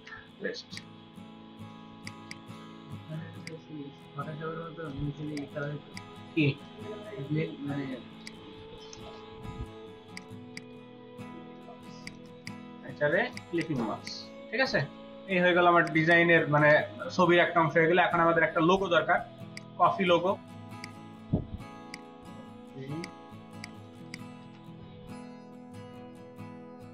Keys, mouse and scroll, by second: 0.0 ctrl+v, 1.8 ctrl+space, 2.0 ctrl+click, 2.6 space, 5.2 space, 10.4 double click, 12.0 shift+click, 12.4 right click, 13.6 double click, 13.8 space, 14.0 double click, 14.2-15.2 space, 15.6-16.6 ctrl+alt+middle drag, 15.8 ctrl+alt+click, 16.6 space, 20.3-20.8 scroll down 5, 20.8 right click, 23.4 space, 24.4 ctrl+v, 25.3 ctrl+space, 26.4 ctrl+space.